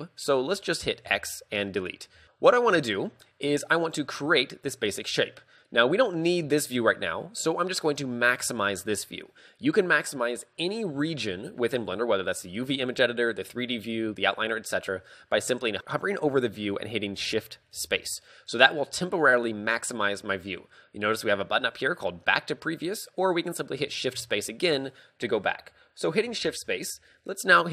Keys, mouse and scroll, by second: 17.8 shift+space, 24.2 shift+space, 26.5 shift+space.